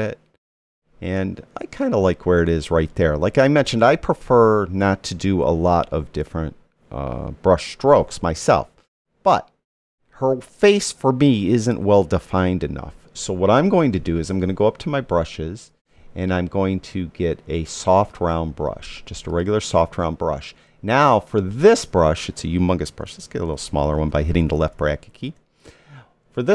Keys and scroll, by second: 22.9 [.